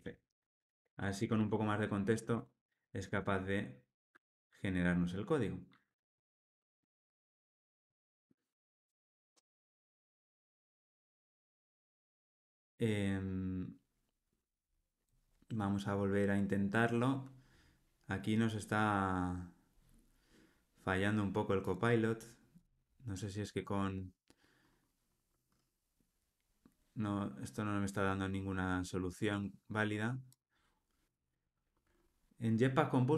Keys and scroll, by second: 1.2 Escape, 5.2 alt+Return, 7.9 alt+super+l, 8.7 super+p, 9.5 Escape.